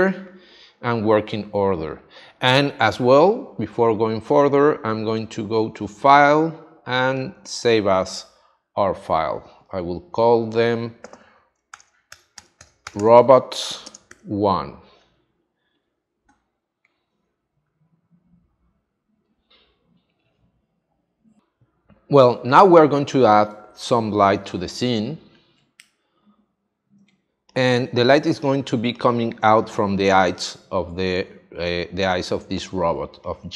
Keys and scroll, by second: 11.7 shift+r, 12.1 o, 13.8 space, 14.1 1, 23.5 space, 27.0 space, 31.3 space.